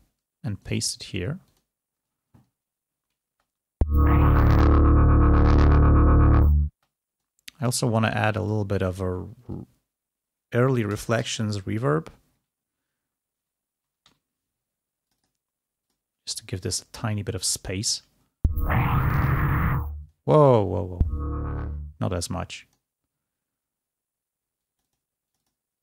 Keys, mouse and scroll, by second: 0.7 right click, 1.6 click, 3.8 space, 6.4 click, 6.8 space, 7.6 right click, 11.4 shift+r, 13.8 l, 14.2 y, 15.0 click, 19.1-20.4 drag, 20.1 space, 20.5 space, 21.6-23.0 drag, 24.8-25.8 drag.